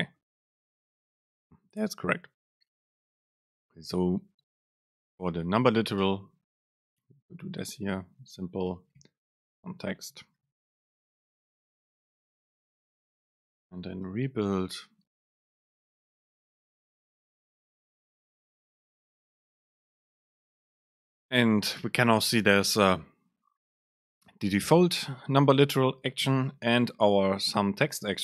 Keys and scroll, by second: 4.6 Return, 4.9 super+space, 9.7 BackSpace, 13.1 ctrl+shift+super+F8, 13.8 ctrl+shift+super+F8, 14.2 ctrl+shift+super+F9, 19.8 super+space.